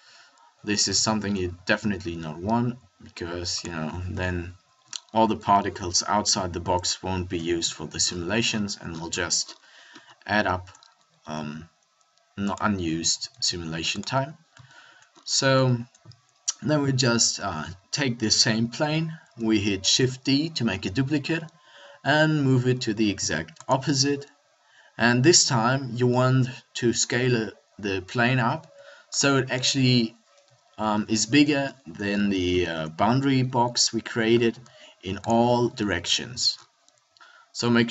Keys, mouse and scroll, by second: 1.7 s, 4.1 KP_7, 7.4 KP_1, 11.2 s, 13.1 s, 19.8-23.6 middle drag, 19.8 shift+d, 28.5 s, 29.2 click, 30.8 KP_7, 33.0 s, 35.8-37.2 middle drag.